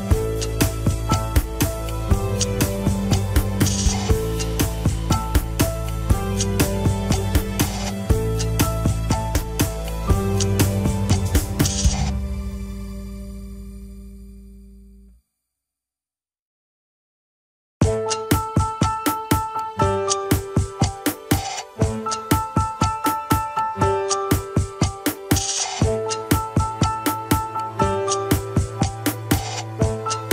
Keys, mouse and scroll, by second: 0.7 ctrl+Tab, 0.9 shift+click, 1.3 ctrl+Tab, 1.7-2.1 scroll up 2, 2.1 alt+z, 2.7-4.4 middle drag, 4.4 ctrl+click, 4.9 alt+z, 5.1-7.2 middle drag, 7.2-10.0 drag, 10.0 scroll down 2, 10.7 scroll up 1, 11.0 click, 12.0-12.9 scroll up 1, 13.3 ctrl+click, 13.5 shift+middle click, 14.4-20.1 drag, 20.1 middle click, 21.1-23.4 drag, 24.5-25.9 middle drag, 25.9-27.9 drag, 28.6-30.3 drag.